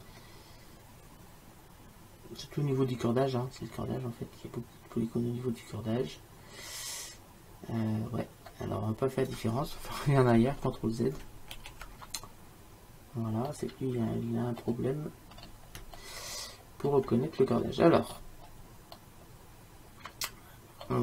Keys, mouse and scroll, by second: 7.8 middle click, 12.5 ctrl+z, 13.8 click, 15.4 middle click, 16.3-20.8 middle drag.